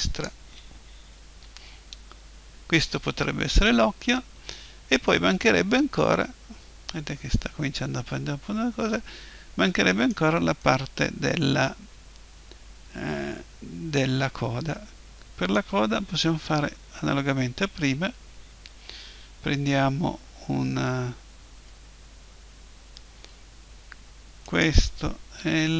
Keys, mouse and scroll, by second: 1.2 KP_1, 5.0-7.0 middle drag, 10.6-12.6 middle drag, 16.2 KP_1, 21.0-24.4 middle drag, 24.4-25.7 right drag, 25.4 l.